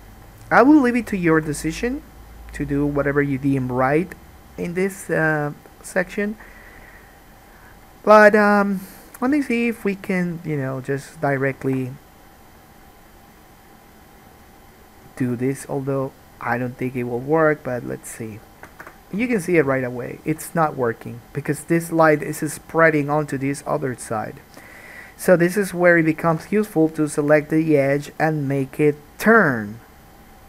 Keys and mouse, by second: 8.6-10.3 drag, 9.4 g, 10.3-11.8 middle drag, 11.8 alt+a, 15.4 k, 19.4 alt+a, 20.6-26.9 middle drag, 26.4 2, 26.9 click, 27.1-30.4 middle drag.